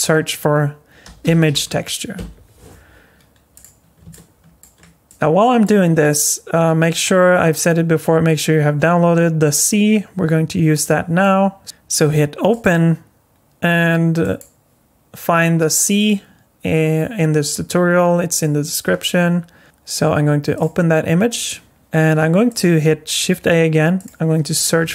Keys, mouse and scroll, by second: 4.1 shift+middle click, 5.1 click, 10.8 click, 12.5 click, 22.5 click, 23.3 shift+a.